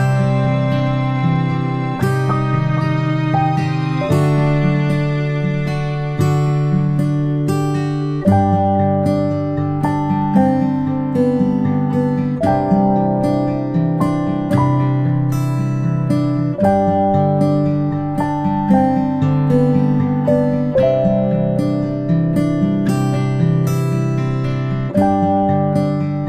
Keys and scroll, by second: 1.5 ctrl+z, 1.7 ctrl+z, 19.5 ctrl+shift+g.